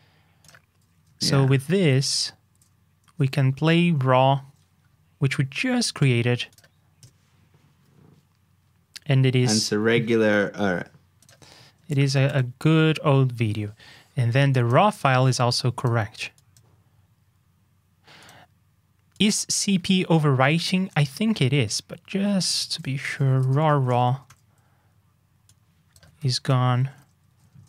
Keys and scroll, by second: 1.2 super+c, 2.5 super+j, 12.2 super+j, 20.1 super+j, 24.2 super+j, 26.1 super+c, 26.9 super+j.